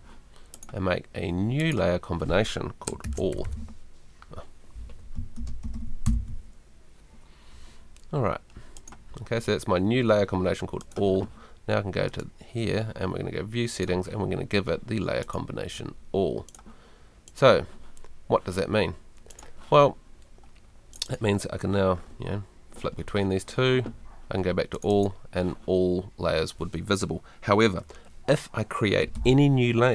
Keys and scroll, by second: 5.1 shift+Right, 5.3 shift+a, 5.6 shift+l, 6.0 Return, 29.1 super+l.